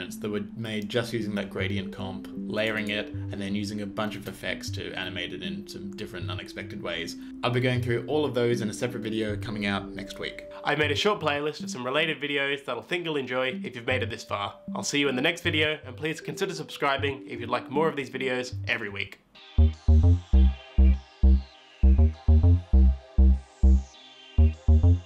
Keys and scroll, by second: 4.1 space, 7.2 space.